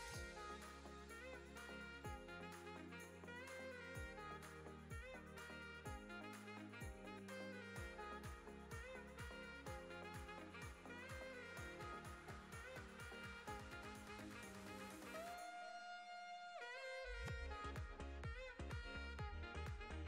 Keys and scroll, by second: 0.9 i, 6.5 Tab, 15.8 Tab, 19.6 2.